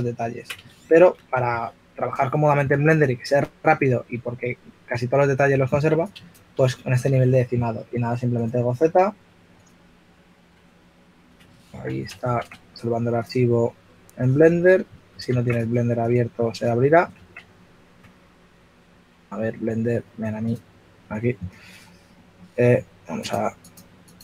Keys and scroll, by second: 0.2 super+z, 0.6 shift+f, 6.8 f, 10.5 super+Tab, 12.2 super+Tab, 15.0 super+Tab, 17.2 super+Tab.